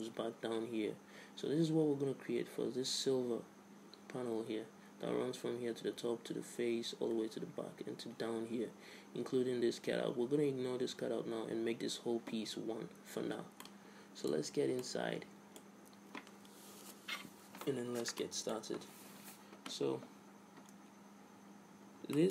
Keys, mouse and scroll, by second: 13.7-16.7 middle drag, 14.6 Tab, 20.2-22.3 middle drag.